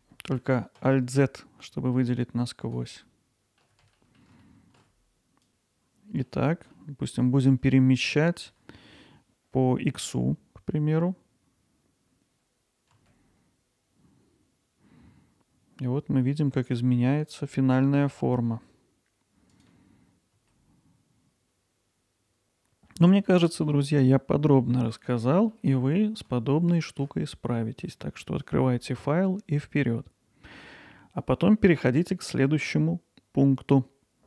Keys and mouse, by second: 1.7-2.8 drag, 3.0 alt+middle click, 4.0 ctrl+alt+middle click, 4.4 click, 5.1 alt+middle click, 5.3 ctrl+alt+middle click, 5.5 alt+middle click, 6.8 middle click, 19.5-20.8 drag, 20.8 middle click, 21.1 Tab, 21.5 alt+middle click, 21.8 alt+middle click, 22.0 click, 22.2 middle click, 22.3-23.1 middle drag, 24.9-25.3 middle drag, 25.5-26.2 alt+middle drag, 26.5-27.0 ctrl+alt+middle drag, 27.3-27.9 middle drag.